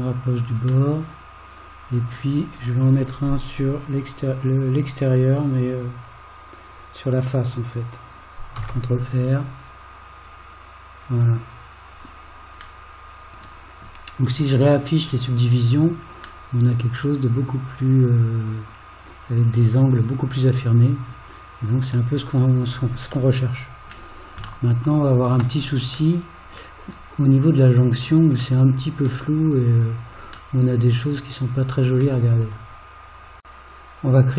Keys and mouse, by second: 0.9-2.2 middle drag, 8.6 ctrl+r, 12.9 middle click, 15.0 click, 16.5-21.1 middle drag, 23.5 middle click, 24.7 shift+middle click, 26.2 middle click, 28.6 middle click, 30.7-32.0 middle drag.